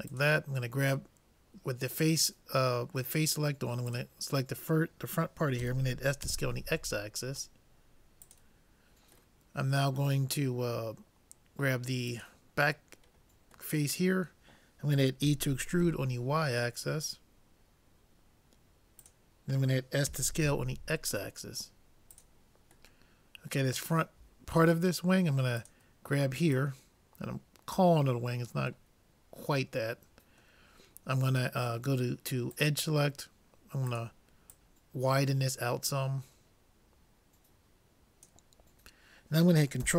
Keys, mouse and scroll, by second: 3.9-5.9 drag, 5.6 s, 9.4-11.3 middle drag, 12.1-13.7 drag, 13.7-15.8 middle drag, 15.3 e, 20.2 s, 23.0 middle click, 25.6-28.3 drag, 28.3-30.8 middle drag, 32.5-36.3 drag.